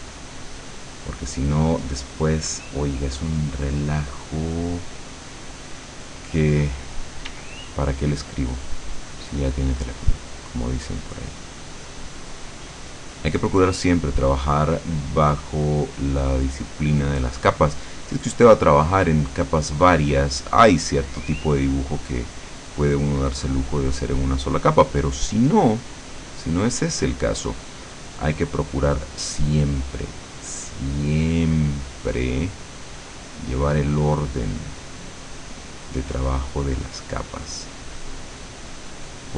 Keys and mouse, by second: 7.3 d, 8.0-10.5 drag, 19.9-30.1 drag, 36.1 click, 36.5-39.3 drag.